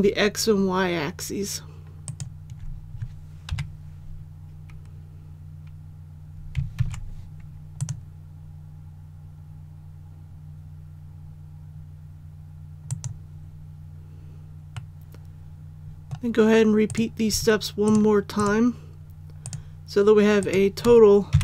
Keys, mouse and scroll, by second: 2.0 alt+right click, 3.5 KP_7, 6.7 alt+e, 7.7 click, 14.7 middle click, 14.8 scroll up 1, 16.1-16.9 scroll up 1, 16.9 right click, 17.8 shift+right click, 18.3 shift+right click, 20.4 shift+right click, 21.3 KP_1.